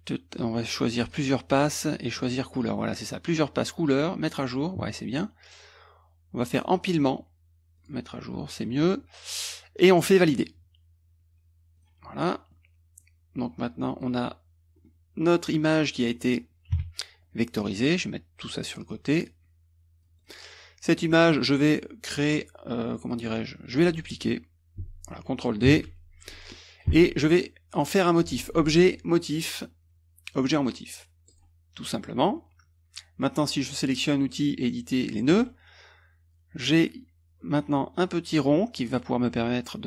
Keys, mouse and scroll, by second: 1.0 click, 1.7 click, 2.5 click, 4.3 click, 6.6 click, 7.8 click, 10.3 click, 11.8 click, 12.2 click, 13.0-14.2 drag, 14.9 click, 16.1 click, 16.8 KP_Subtract, 17.9-19.1 drag, 19.3-20.4 drag, 20.6 click, 25.7 ctrl+d, 26.0 ctrl+click, 27.8 click, 31.3 click, 32.0 click, 35.3 click, 37.9-39.8 drag.